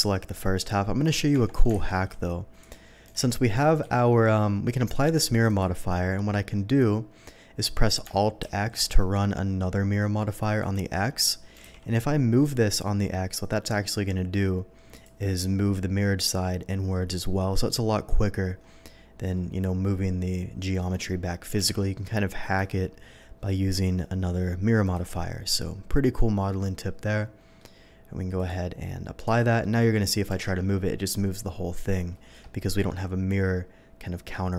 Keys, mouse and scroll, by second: 1.0 middle click, 1.3 Tab, 1.8 alt+a, 2.2 z, 2.6 click, 3.0 g, 3.1 x, 3.8 Escape, 4.9 click, 5.5 click, 6.0 scroll up 1, 8.0 scroll down 1, 8.5 alt+x, 10.6 click, 11.6 g, 11.6 x, 14.9 shift+click, 21.6 x, 21.8 g, 24.8 shift+click, 25.5-27.6 shift+middle drag, 28.4 click, 29.2 click, 29.6 middle click, 30.3 g, 30.5 x, 32.3 Escape, 32.8 middle click.